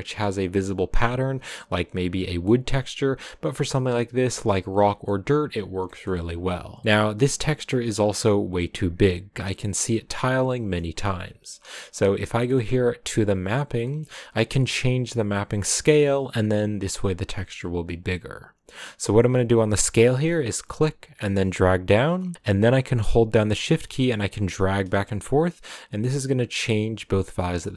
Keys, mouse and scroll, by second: 1.6-2.2 scroll down 1, 2.2 scroll down 1, 2.4 middle click, 3.2-3.7 scroll up 2, 3.7-4.8 scroll up 1, 4.8 scroll down 1, 5.0 middle click, 5.3-5.9 scroll down 1, 5.9 middle click, 6.5-6.8 scroll down 1, 6.8 middle click, 7.8-8.4 scroll up 3, 8.4-9.5 scroll up 1, 9.5-10.0 scroll down 1, 10.0-10.5 scroll down 1, 10.5-13.3 middle drag, 13.3 click, 26.8 middle click, 27.5 middle click.